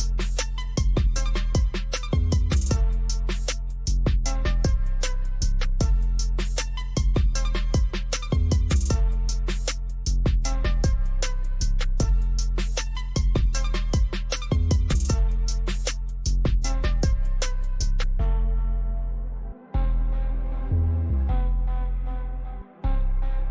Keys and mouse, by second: 1.7-8.1 drag, 8.1-11.6 drag, 16.3-20.0 drag.